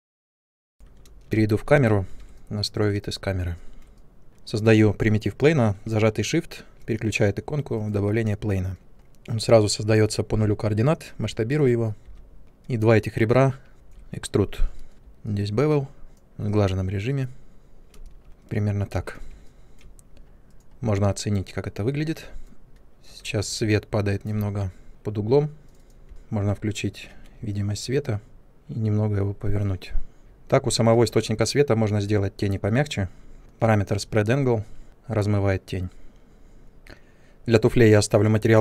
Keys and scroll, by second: 0.0 ctrl+space, 0.6 ctrl+1, 1.3 ctrl+space, 10.4 r, 12.0 w, 14.9 b, 18.2 space, 26.0 e, 26.4 ctrl+1, 30.2 space.